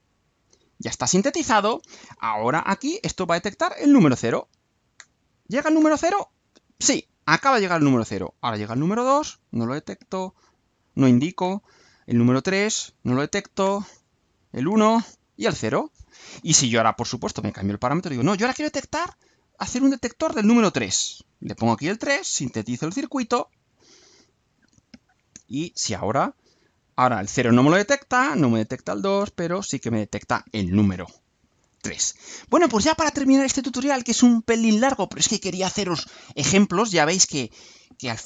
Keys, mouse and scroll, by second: 18.7 click, 19.7 BackSpace, 20.8 3, 21.8 click, 22.8 ctrl+u.